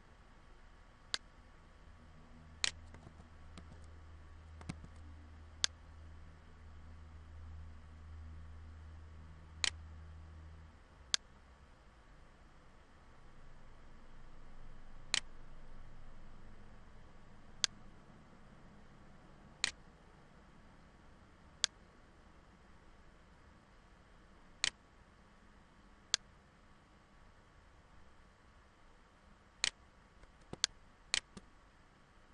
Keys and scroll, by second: 2.6 ctrl+z, 4.6 ctrl+z.